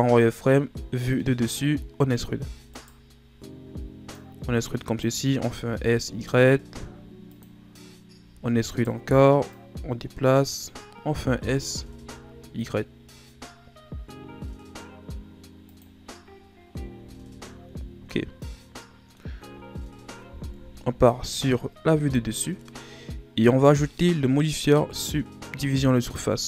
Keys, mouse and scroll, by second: 0.5-2.3 shift+scroll up 2, 2.3 e, 4.1-5.5 drag, 5.5 s, 9.6-11.1 drag, 11.1 s, 16.1-16.9 scroll down 2, 16.9 z, 17.4-19.6 middle drag, 19.6-20.5 ctrl+scroll up 1, 20.5 KP_7, 21.7 ctrl+scroll up 2, 23.6 Tab, 25.9 click.